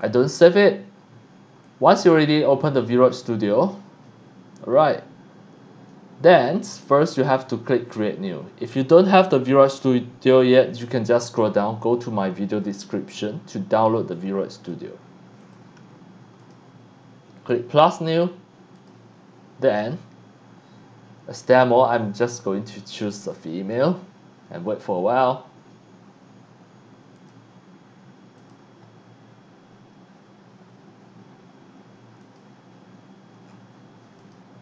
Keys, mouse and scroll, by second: 0.0 click, 1.6-2.6 drag, 11.1 click, 12.6 click, 14.1 click, 15.4 click, 16.4 click, 18.8 click, 23.2 click, 23.4 click, 27.2 click, 28.4 click, 32.2 click, 33.4 scroll down 1, 34.2 click.